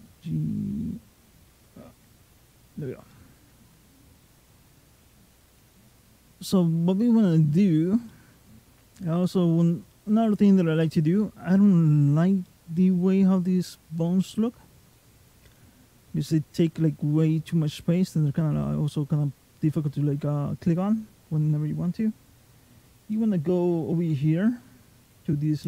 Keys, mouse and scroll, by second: 1.7 alt+g, 2.9 middle click, 2.9 scroll down 1, 5.7 click, 7.5-7.9 scroll down 2, 7.9 middle click, 9.0-9.7 scroll up 4, 9.7 middle click, 11.9-12.3 scroll down 2, 12.3 middle click, 14.6 click, 15.3 click, 16.1 middle click, 22.8 click.